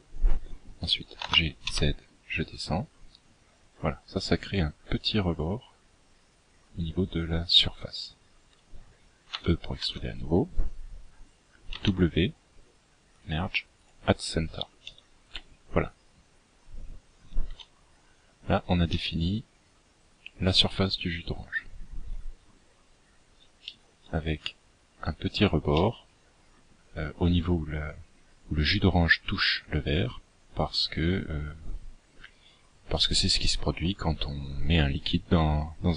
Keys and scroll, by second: 7.3 e, 9.7 w, 15.4 z.